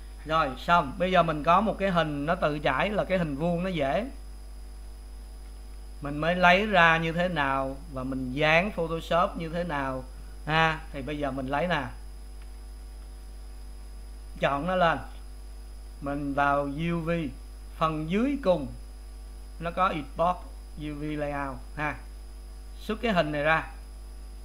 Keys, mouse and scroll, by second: 6.6 click, 7.1 click, 13.6 click, 15.0 click, 23.9 click.